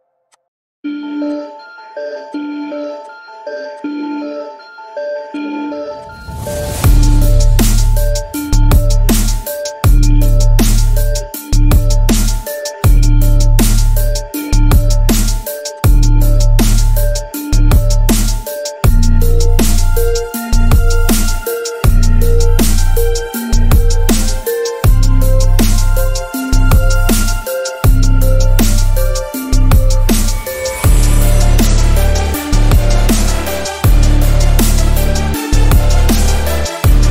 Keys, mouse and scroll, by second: 0.4 click, 1.4-1.7 click, 3.4 alt+click, 4.0-4.7 alt+click, 6.1 alt+click, 6.8-7.2 alt+scroll up 1, 7.2 alt+scroll down 1, 8.5 click, 9.3 alt+scroll down 1, 9.5 space, 9.6 click, 9.8-10.1 space, 10.4 alt+scroll down 1, 12.3 click, 13.8 click, 15.7-19.5 drag, 23.4-25.0 drag, 25.7 Home, 27.1 click, 28.4 alt+scroll up 1, 28.6 space, 28.7-29.1 click, 29.1 space, 29.3 alt+scroll up 1, 30.1 right click, 30.8 click, 31.5 alt+scroll up 1, 31.9-32.7 drag.